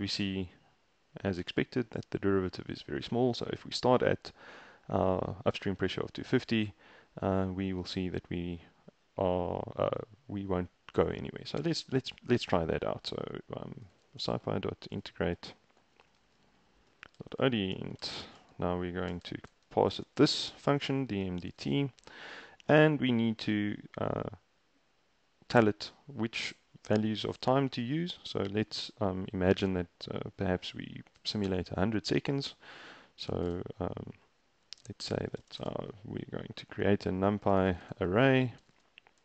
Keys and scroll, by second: 13.7-22.0 typing, 22.3 ctrl+a, 25.6 Return, 25.9 Up, 33.3 typing, 35.1-35.9 typing, 37.3-39.2 typing.